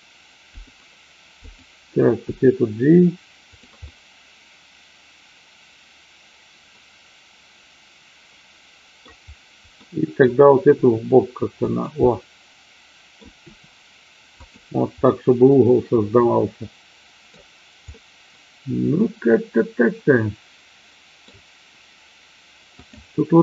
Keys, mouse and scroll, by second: 0.4 click, 1.4 click, 2.3 g, 3.4 click, 3.8-9.0 middle drag, 9.8-10.2 middle drag, 10.7 r, 11.6 click, 12.0-13.2 middle drag, 13.5 r, 14.3 click, 15.1-17.3 middle drag, 17.8-21.3 middle drag, 22.8 click.